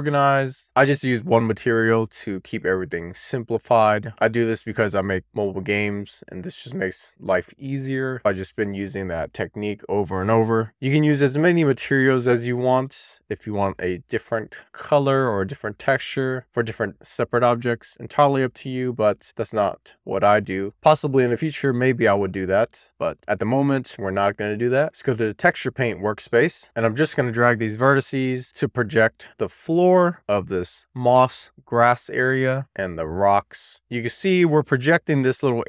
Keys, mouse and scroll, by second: 3.9 click, 6.7 middle click, 7.5-8.0 scroll down 3, 8.0 shift+middle click, 8.4-8.8 scroll up 1, 8.8 middle click, 9.6-10.2 scroll up 1, 10.2 click, 12.2 click, 12.9 shift+middle click, 20.2 a, 24.9 click, 25.4-26.3 scroll down 6, 25.8 middle click, 26.3 shift+middle click, 26.8 click, 28.4-29.5 scroll up 1, 30.1 scroll up 1, 30.4 drag, 31.1 click, 32.3-32.6 drag, 32.7 click, 33.8 shift+middle click, 34.1 click, 35.0 click.